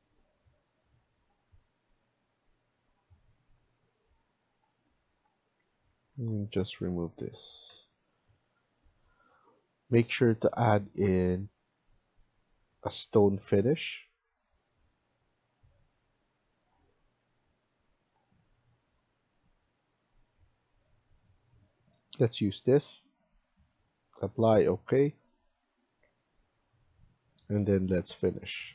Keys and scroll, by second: 5.5 Escape, 5.8 Escape, 6.0 Escape, 7.5 Delete.